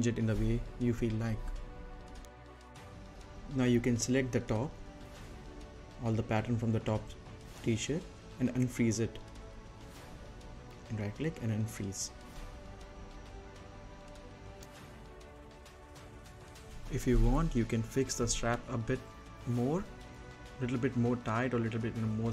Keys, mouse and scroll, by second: 1.5 right click, 2.3 middle click, 2.7 click, 3.1 right click, 3.5-5.5 middle drag, 5.5 space, 6.6-11.4 drag, 11.8 right click, 13.5 click, 15.0 scroll up 1, 15.2-16.5 right drag, 16.5-17.0 scroll down 1, 17.0 middle click, 17.1 scroll down 1, 17.3 right click, 17.8 middle click, 17.9-18.3 scroll down 2, 18.1 middle click, 18.4 scroll up 2, 18.5 middle click, 18.8 middle click, 18.9 scroll down 1, 19.1 middle click, 19.3 z, 19.8 click, 20.4 Right, 21.7 Right.